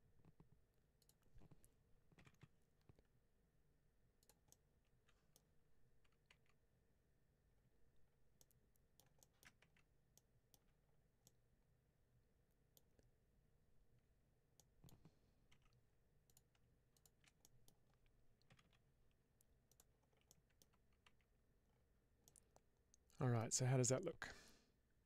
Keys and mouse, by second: 2.0 g, 2.2 g, 4.1 click, 4.4 middle click, 6.2 Tab, 8.2 middle click, 9.1 shift+middle click, 9.5 Tab, 10.1 middle click, 11.2-12.6 middle drag, 14.5 middle click, 15.4 2, 16.8 click, 17.3 middle click, 18.4 g, 18.5 g, 19.6 click, 20.2 middle click, 21.0 Tab, 22.1-23.2 middle drag.